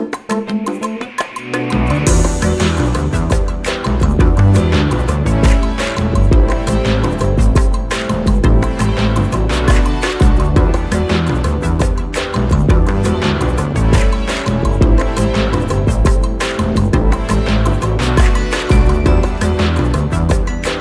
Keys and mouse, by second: 5.3-7.6 drag, 14.9 click.